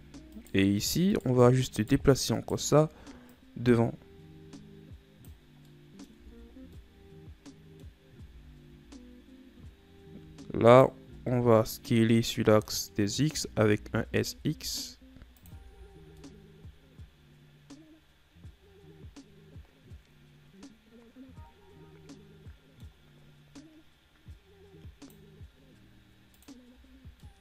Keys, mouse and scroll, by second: 0.5 right click, 1.4 right click, 2.0 shift+right click, 2.5 shift+right click, 3.5-5.9 drag, 5.9 middle click, 6.4 Tab, 6.8 scroll down 1, 7.0-8.2 middle drag, 8.2 scroll up 2, 8.5 Tab, 10.9 alt+right click, 11.5-13.5 middle drag, 13.5 s, 15.8 Tab, 16.2 scroll down 3, 16.4-19.4 middle drag, 26.9 click.